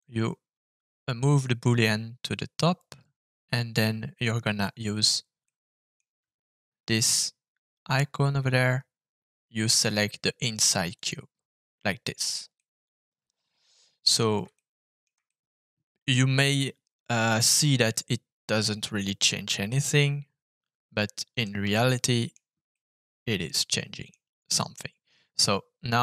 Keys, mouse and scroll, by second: 5.4 middle click, 7.8 click, 12.5-14.1 middle drag, 14.5 shift+middle click, 15.2-16.6 middle drag, 17.1-21.4 middle drag, 21.7 shift+middle click, 22.7-24.0 middle drag.